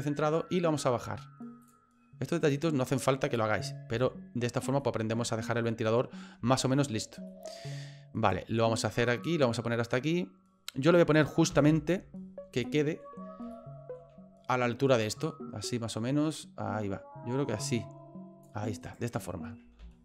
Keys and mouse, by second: 2.5 click, 4.1 shift+middle click, 4.9 shift+middle click, 5.7 middle click, 6.6 shift+middle click, 7.4 middle click, 8.4 click, 11.5 KP_7, 12.7 middle click, 13.6 middle click, 15.7-18.5 drag, 18.8 right click, 19.8 ctrl+z.